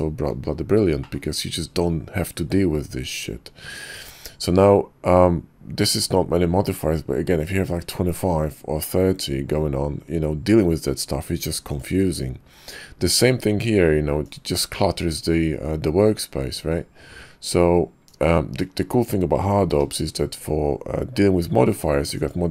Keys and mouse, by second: 1.0 click, 3.9 ctrl+`, 14.2 click, 18.1 click, 19.7 q.